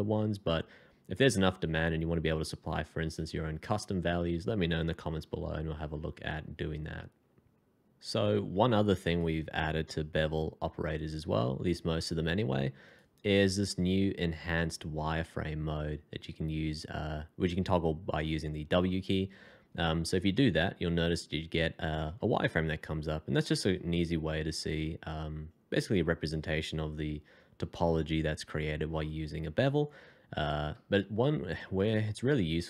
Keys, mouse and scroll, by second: 11.6 f, 20.3 w, 22.5 alt+scroll up 1, 30.7 Escape, 31.1 middle click.